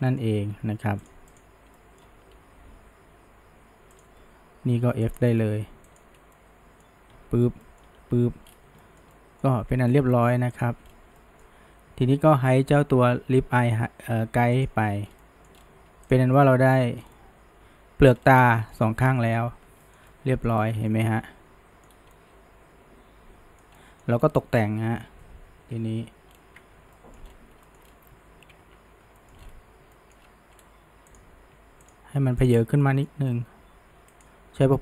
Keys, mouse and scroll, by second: 0.1 middle drag, 0.4 r, 1.4 click, 1.8 middle click, 2.4 g, 5.1 click, 5.9 shift+click, 6.4-7.2 middle drag, 7.2 f, 7.6-8.0 middle drag, 8.0 f, 8.5-8.8 scroll down 1, 8.8-9.6 shift+middle drag, 9.6 Tab, 9.9 scroll down 2, 10.1-10.6 shift+middle drag, 10.6 click, 10.8-11.2 scroll down 1, 11.2-14.3 middle drag, 14.6 click, 15.1 scroll down 1, 15.2-15.6 middle drag, 15.6-16.1 scroll up 1, 16.1 click, 16.4-17.0 middle drag, 17.0 scroll down 1, 17.2-18.1 middle drag, 18.1-18.6 scroll up 1, 18.6-19.4 shift+middle drag, 19.4 Tab, 19.8-20.6 shift+middle drag, 20.6 scroll up 1, 20.9-24.2 middle drag, 24.2 scroll down 1, 24.4 middle click, 25.2 KP_1, 25.6 KP_3, 26.3-27.0 scroll down 1, 27.0 shift+middle drag, 27.3-27.7 scroll up 1, 27.7 shift+middle drag, 27.9 shift+scroll down 1, 28.4 ctrl+KP_3, 29.2 shift+middle drag, 29.4-29.9 scroll up 1, 30.0 shift+middle drag, 30.3 scroll up 1, 31.1 click, 31.9 shift+click, 32.5 click, 32.8-33.7 shift+middle drag, 33.7 g.